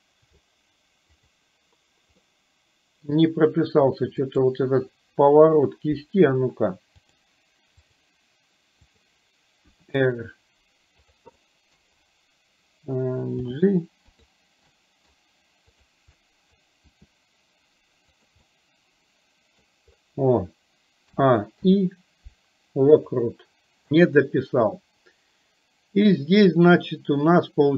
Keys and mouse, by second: 1.3 click, 2.3-3.3 middle drag, 4.4 click, 7.3 click, 8.9 click, 9.8 r, 11.5 middle click, 13.5 g, 14.8-15.3 middle drag, 15.8-16.2 drag, 16.3 middle click, 16.9 r, 18.5-19.8 middle drag, 21.3 a, 21.7 i.